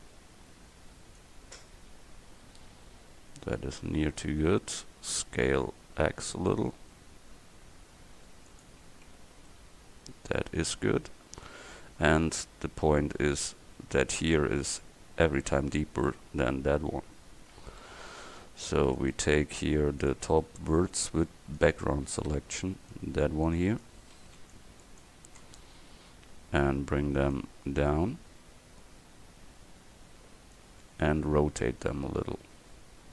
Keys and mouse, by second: 0.6 click, 2.1 KP_1, 5.4 s, 9.1 Tab, 9.5-10.9 drag, 11.1 click, 17.0 Tab, 17.6 a, 18.0 c, 20.1 click, 22.3 c, 24.2 c, 32.0 KP_1, 32.8 KP_3.